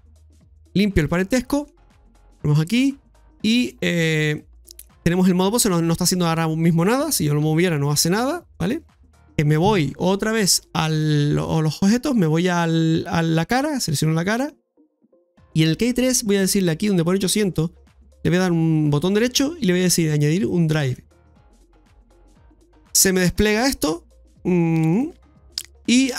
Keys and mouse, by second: 1.4 middle click, 3.2 click, 4.3 middle click, 10.4 click, 13.1 right click, 17.8-22.0 right drag, 23.2-26.1 right drag.